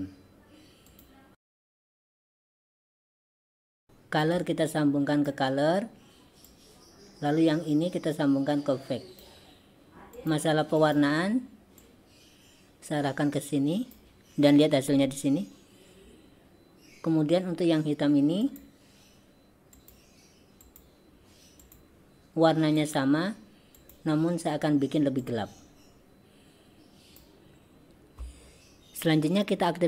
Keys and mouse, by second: 1.8 click, 2.1 click, 2.8 click, 3.3 click, 3.6 drag, 4.3-5.4 drag, 6.5-9.3 drag, 10.3 click, 10.9 click, 18.5 click, 19.9 click, 20.7 click, 23.9 click.